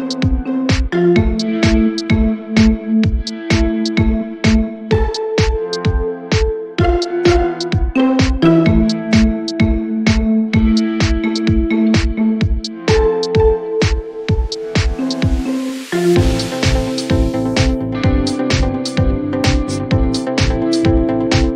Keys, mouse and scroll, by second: 3.2 z, 3.9-4.8 click, 16.7 shift+click, 20.7 space, 21.0-21.4 click, 21.2 space.